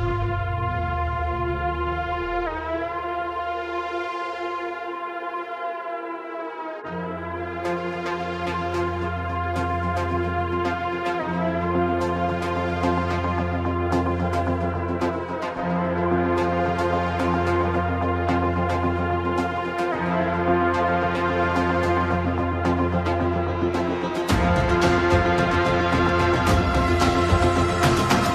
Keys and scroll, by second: 22.4 BackSpace, 23.7 Return.